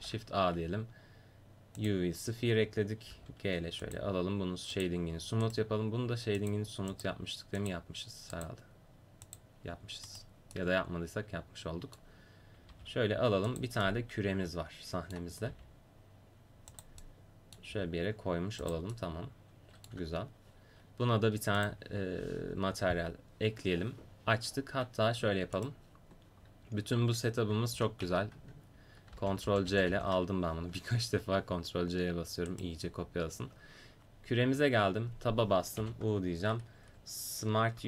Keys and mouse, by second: 3.1 g, 4.7-8.8 drag, 5.5-7.2 right drag, 9.2-10.8 drag, 10.1 right click, 10.6 middle click, 11.3 click, 11.8 middle click, 12.7 g, 13.9 middle click, 15.5 g, 17.7 g, 19.0 middle click, 21.6 click, 25.6-27.8 drag, 27.8 a, 28.0 a, 29.1 ctrl+c, 29.5 ctrl+c, 29.7 ctrl+c, 29.9 ctrl+c, 32.5-34.4 drag, 34.4 Tab, 35.8 u.